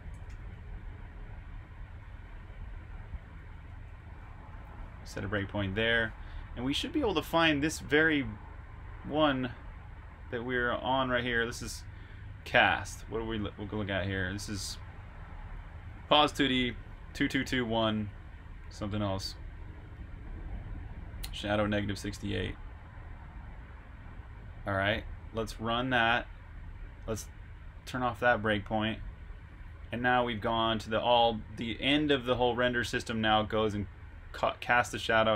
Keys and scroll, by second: 0.0-0.2 typing, 1.6-3.6 typing, 4.4 super+\, 5.0-6.9 typing, 9.0 typing.